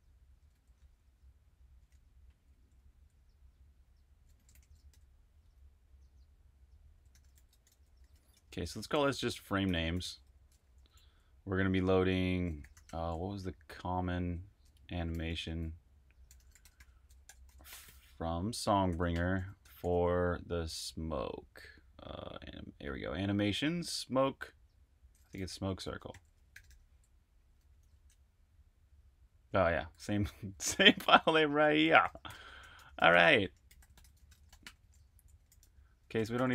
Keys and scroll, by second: 0.0-0.8 typing, 1.8-3.0 typing, 4.3-5.3 typing, 6.7-8.9 typing, 10.6-11.2 typing, 12.3-24.1 typing, 25.3-28.3 typing, 30.6-32.3 typing, 33.6-36.5 typing.